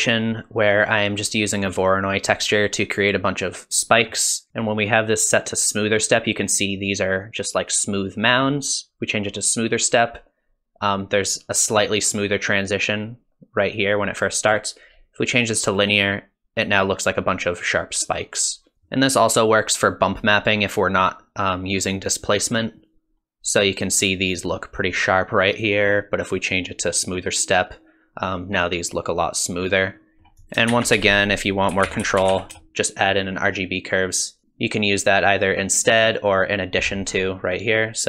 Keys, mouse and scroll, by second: 0.8 click, 3.8 middle click, 4.5 shift+middle click, 8.7 click, 14.5 click, 18.7 middle click, 18.7-19.5 scroll down 2, 25.5 click, 29.8 middle click, 30.4 click, 30.7 shift+a.